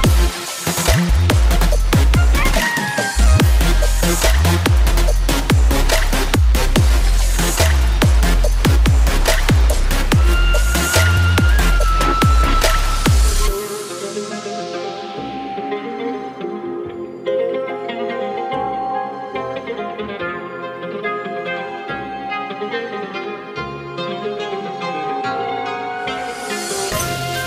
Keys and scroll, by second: 2.7 Delete, 4.1 alt+Delete.